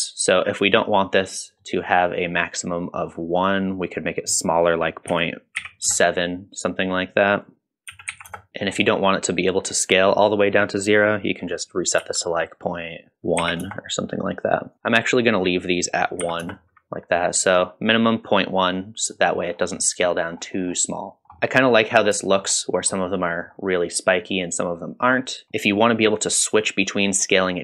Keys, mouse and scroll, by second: 1.6-3.0 middle drag, 3.5-4.5 scroll up 1, 4.6-6.4 drag, 7.3-8.5 drag, 8.5 middle click, 11.0-14.0 drag, 14.7 click, 15.5-16.6 drag, 19.1 middle drag, 19.5 scroll up 2, 19.8-20.4 middle drag, 20.6 scroll down 1, 21.1 middle click, 21.1-21.4 scroll down 2, 21.2 scroll up 1, 21.4 middle drag, 21.8-22.1 scroll down 1, 22.3 shift+middle click, 23.0-23.5 middle drag, 24.8 middle drag, 25.5-26.5 scroll down 2.